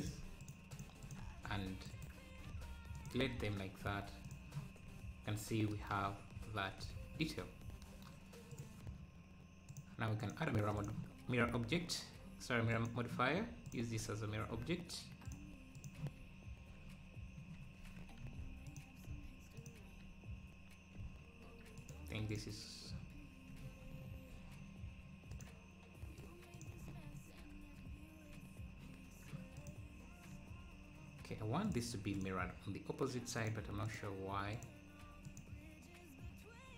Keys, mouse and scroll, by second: 1.4 c, 2.4 x, 3.2 Tab, 4.2 click, 6.2 scroll down 1, 6.8 scroll up 2, 7.5 scroll down 2, 8.5-11.2 drag, 11.2 scroll down 1, 12.7-14.0 drag, 15.3 click, 18.2 ctrl+a, 18.8 ctrl+a, 19.1 ctrl+a, 21.8-23.1 drag, 23.6 scroll down 2, 25.3-27.0 drag, 29.6 click, 31.6-36.7 drag.